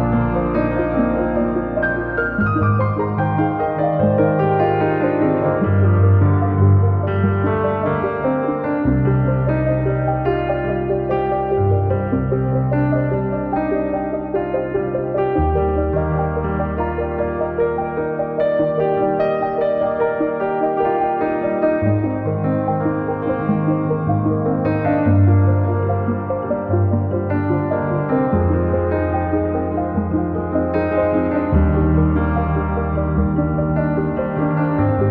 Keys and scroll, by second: 0.0 Escape, 4.5 Return, 6.3 Escape, 9.7 Return, 12.4 space, 12.5 Escape, 13.5 Escape, 15.5 Escape, 17.1 Delete, 25.6 space.